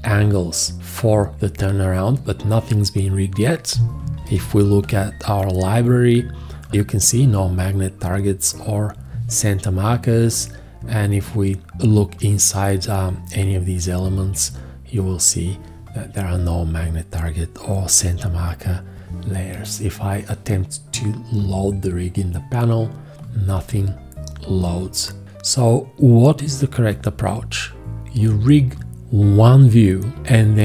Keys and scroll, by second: 4.2 ctrl+l.